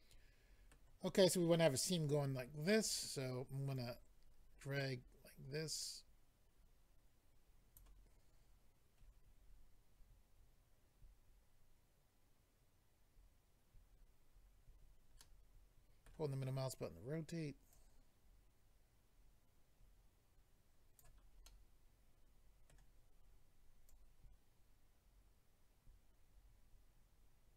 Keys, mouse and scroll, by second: 3.7 click, 9.3-10.6 scroll down 4, 14.3-15.2 scroll up 2, 15.2 middle click, 15.2-15.6 scroll up 1, 17.7 click, 21.4 middle click, 23.9 click.